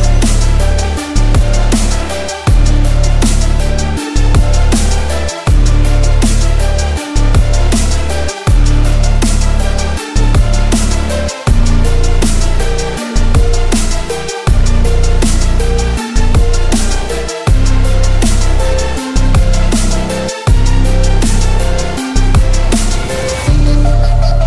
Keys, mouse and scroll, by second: 0.0 ctrl+KP_Add, 0.6 ctrl+KP_Subtract, 1.5-2.7 drag, 2.7 middle click, 2.9 s, 4.7-5.3 drag, 5.3 Tab, 5.8 click, 5.9 middle drag, 6.0 click, 6.2 middle click, 7.1 ctrl+3, 8.6-9.7 drag, 9.7 middle click, 9.9 alt+click, 9.9 alt+middle click, 10.8 g, 10.9 z, 11.8 click, 12.4 shift+click, 12.5 shift+middle click, 12.6 shift+click, 13.6 alt+click, 14.4 g, 14.6 x, 15.9 click, 16.1 Tab, 16.7 click, 18.0-18.6 drag, 18.9 shift+drag, 19.3-19.9 drag, 20.2 ctrl+a, 20.4 shift+middle drag, 20.6 shift+click, 20.7 shift+middle click, 21.3 drag, 22.8 drag, 23.7 shift+drag, 24.1-24.4 drag.